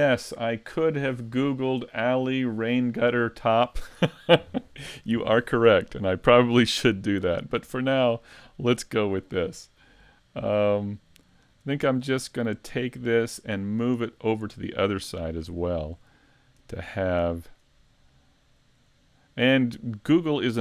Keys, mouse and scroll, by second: 7.0 middle click, 10.3 middle click, 12.2 middle click, 14.6 middle click, 15.2-15.6 scroll up 2, 15.6 shift+middle click, 15.8 shift+middle click, 16.6 right click, 17.4 shift+right click, 18.6 right click, 19.0 shift+middle click, 20.4 shift+right click.